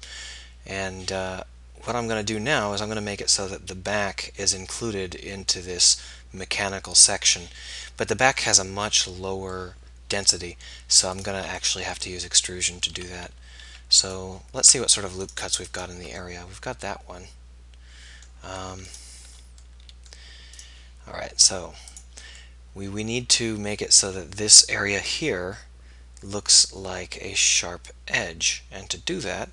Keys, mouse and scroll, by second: 0.5 middle click, 1.3 middle click, 2.6-4.6 middle drag, 4.6 click, 5.5 middle click, 5.6 click, 6.4 middle click, 7.0-8.4 middle drag, 8.4-9.5 drag, 11.6-12.9 middle drag, 17.4 middle click, 17.8 middle click, 19.7 click, 23.0 middle click, 23.1 click, 23.2 middle click, 24.8 middle click, 25.6 middle click, 26.9 middle click, 28.5 middle click.